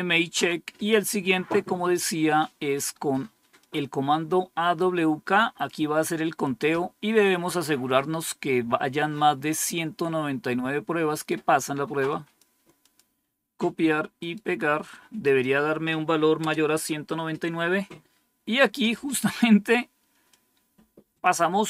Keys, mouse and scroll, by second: 0.2 Page_Down, 3.5-5.6 drag, 11.0 right click, 12.0 click, 12.8 click, 14.1 right click, 15.2 click, 16.3 Return, 20.2-21.2 drag, 21.3-21.6 drag.